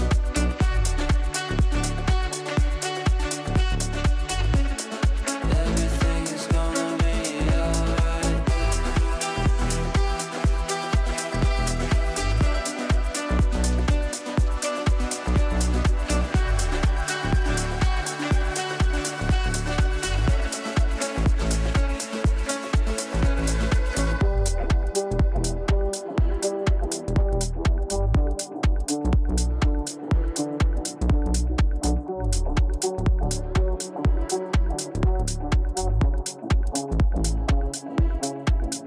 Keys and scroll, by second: 2.0 Up, 5.5 shift+F2, 5.8 Escape, 33.7 Insert, 35.3 Delete, 36.7 shift+Page_Up.